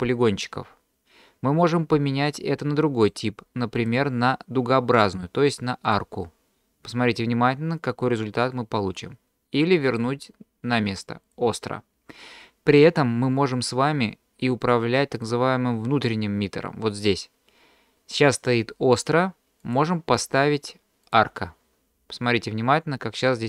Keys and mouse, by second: 2.3-3.1 middle drag, 3.9-6.0 drag, 10.0-11.4 drag, 14.7-15.3 middle drag, 19.8-21.2 drag.